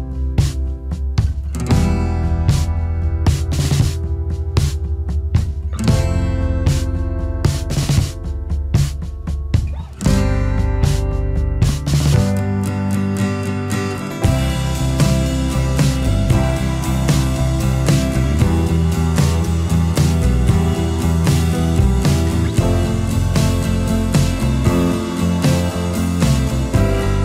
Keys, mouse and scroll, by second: 0.5 space, 2.9 space, 4.2 space, 5.7 space, 7.9 alt+scroll down 1, 7.9 space, 8.7 shift+a, 8.9 space, 11.3 space, 13.4 alt+scroll up 1, 13.8 alt+scroll down 1, 13.9 space, 14.6-15.0 alt+scroll up 1, 16.1 space, 17.5 space, 20.2 space, 21.0 alt+click, 21.5-22.1 alt+scroll down 2, 21.6 space, 23.3 alt+scroll up 1, 24.3 alt+scroll down 1, 24.4 space, 26.5 space, 26.7 alt+scroll up 1.